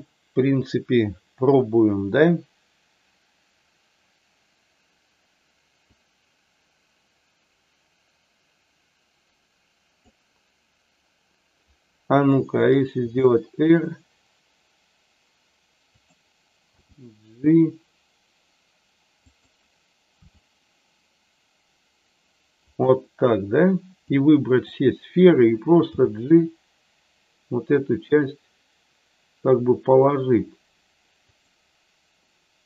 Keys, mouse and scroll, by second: 5.9-10.0 drag, 13.0 r, 15.9 click, 16.7 g, 19.3 click, 20.2 r, 22.6 click, 24.0 click, 25.9 g.